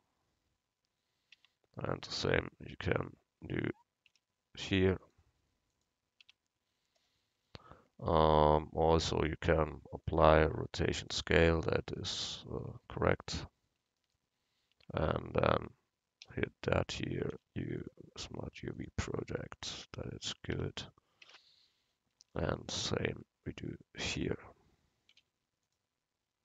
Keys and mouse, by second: 1.4 Tab, 2.1 a, 2.9 l, 4.1 u, 6.3 Tab, 14.5 click, 14.8 Tab, 16.3 l, 17.4 u, 19.8 Tab, 20.6 Tab, 21.3 a, 24.2 l, 25.2 u.